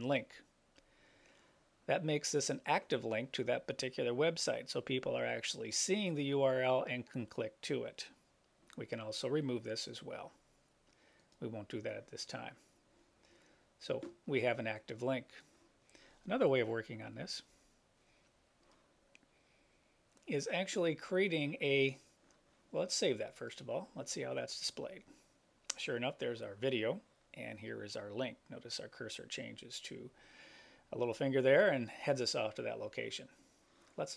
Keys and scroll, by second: 16.6 Return, 17.6 Return.